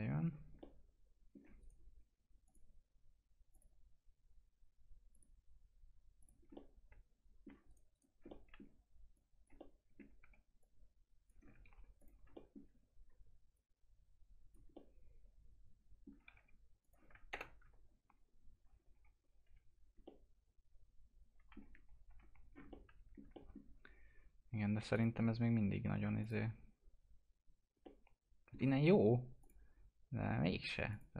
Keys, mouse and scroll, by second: 0.4 scroll up 1, 0.6 alt+middle click, 1.6 right click, 2.5 click, 6.5 alt+middle click, 7.7 right click, 8.3 alt+middle click, 9.2 click, 9.6 alt+middle click, 10.2 w, 10.6 click, 11.7 ctrl+z, 12.0 click, 13.6 click, 14.7-16.4 alt+middle drag, 16.4 2, 16.8 click, 17.3 ctrl+BackSpace, 18.7-19.9 scroll down 2, 19.0 F4, 20.1-22.1 alt+middle drag, 22.1 F4, 22.4 scroll up 1, 22.7 alt+middle click, 24.9 click, 27.8-29.4 alt+middle drag, 29.4 click.